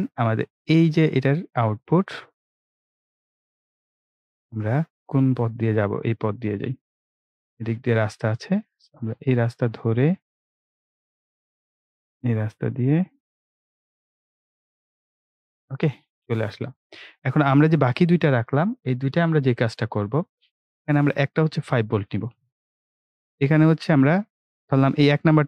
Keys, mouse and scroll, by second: 0.9 click, 6.8 click, 11.2 click, 13.7 click, 21.0-21.3 scroll up 1.